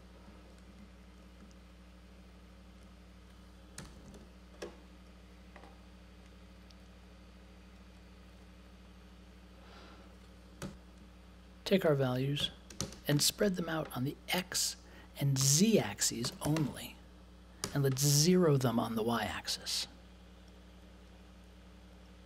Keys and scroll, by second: 3.5-4.6 typing, 10.6 n, 12.3 n, 12.7 shift+8, 13.1 space, 15.4 5, 16.2 space, 16.4 0, 16.5 space, 17.6 5.